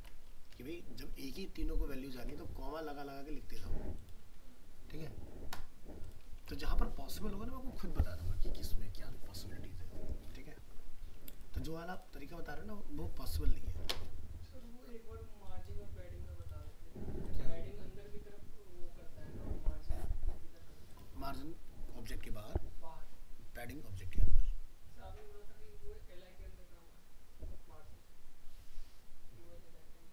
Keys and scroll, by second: 6.4 ctrl+s.